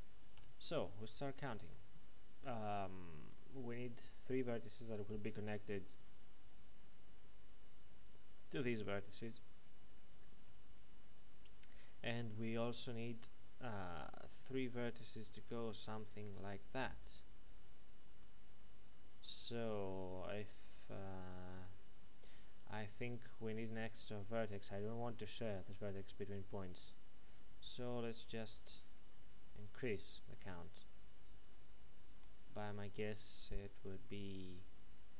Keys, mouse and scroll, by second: 1.7 shift+middle click, 6.0-11.3 typing, 6.6 click, 13.1-17.7 typing, 14.2 click, 15.1 click, 16.3 click, 20.3 typing, 28.1 click, 32.2-34.6 typing, 32.4 right click.